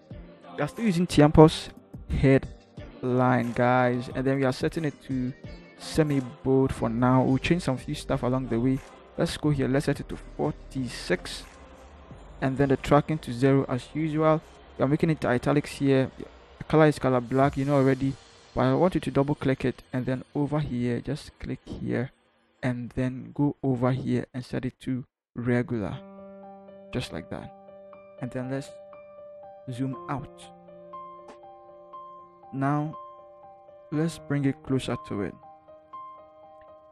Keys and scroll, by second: 11.0 6, 11.6 Return.